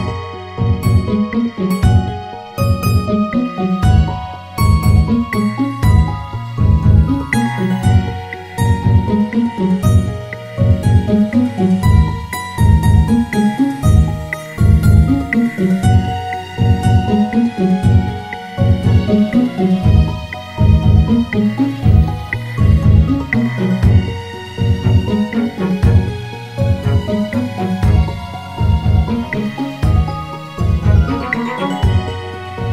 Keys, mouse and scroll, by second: 0.3 r, 4.2-4.6 scroll down 1, 4.6 Tab, 5.6 click, 6.6-7.4 scroll down 2, 7.4-9.0 scroll down 1, 9.0 scroll down 1, 9.2 click, 12.5 s, 14.1 s, 17.4 r, 31.3 click.